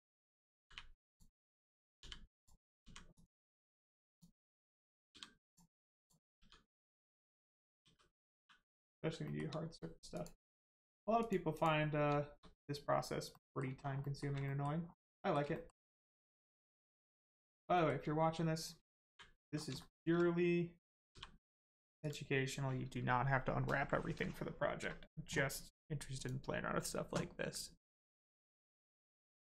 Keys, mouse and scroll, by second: 1.9 u, 2.3 click, 2.8 u, 3.1 click, 5.1 g, 5.4 click, 6.3 g, 6.9 click, 7.8 g, 8.3 click, 9.2 shift+middle click, 9.5 scroll up 1, 10.1 click, 13.3 middle click, 13.7 shift+scroll down 1, 14.0 shift+middle click, 14.4 middle click, 14.5 middle click, 14.8 scroll up 1, 15.1 middle click, 15.5 shift+middle click, 15.9 middle click, 16.0 middle click, 17.7 shift+middle click, 19.5 scroll down 1, 19.7 shift+middle click, 20.1 scroll up 1, 21.1 g, 22.0 click, 26.1 click.